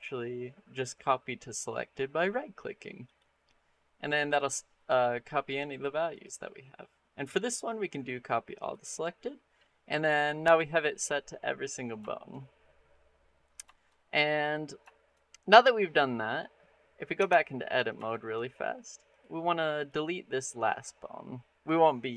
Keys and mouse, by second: 6.0-8.6 drag, 9.7 middle click, 10.3 middle click, 11.9 shift+middle drag, 12.8 middle click, 13.5 shift+middle click, 14.0 middle click, 14.5 middle drag, 14.8 shift+middle drag, 15.1 middle click, 15.6 middle click, 16.6 middle click, 17.0 Tab, 17.9 shift+middle click, 19.6 click.